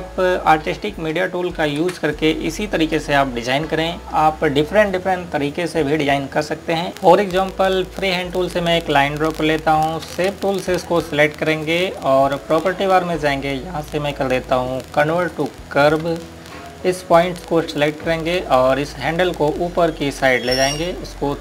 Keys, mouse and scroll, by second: 0.7 click, 2.6 ctrl+g, 3.1 click, 8.9 click, 10.6 click, 10.9 space, 11.8 click, 16.1 click.